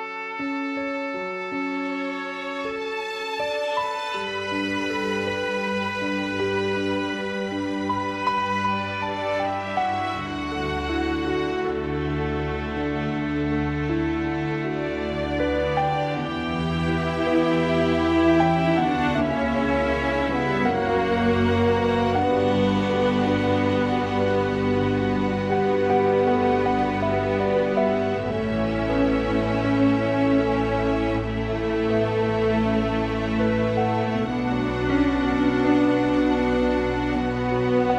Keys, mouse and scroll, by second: 7.4 shift+click, 8.1 shift+click, 8.2 g, 9.6 click, 10.4 g, 13.9 shift+click, 15.4 click, 16.3 e, 18.5 g, 19.7 r, 20.7 s, 22.2 g, 23.4 click, 24.9 click, 26.2 click, 26.9 g, 28.7 click, 29.6 r, 31.4 g, 32.1 s, 33.3 click, 34.2-35.3 middle drag, 35.3 shift+click, 35.6 g, 37.0 shift+click.